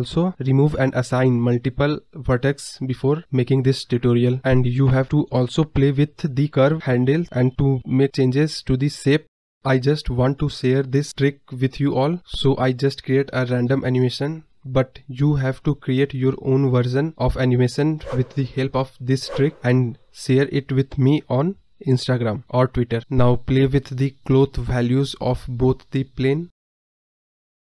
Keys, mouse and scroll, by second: 5.6 Tab, 6.0-6.6 scroll down 13, 6.9 click, 7.1-7.6 scroll up 4, 7.6 KP_Decimal, 7.9 scroll up 4, 8.1 middle drag, 8.4 scroll down 3, 8.5 middle drag, 8.7 scroll up 1, 9.5 Tab, 10.7 Tab, 11.1 Tab, 11.9 click, 12.6 s, 14.0-15.5 middle drag, 16.0 Tab, 16.3 scroll down 2, 18.1 scroll down 2, 18.2 middle drag, 18.5-20.1 scroll up 2, 21.6 click, 22.3-23.3 drag, 23.6 click, 25.0-26.0 drag, 26.5-27.6 drag, 27.6-27.7 scroll down 3.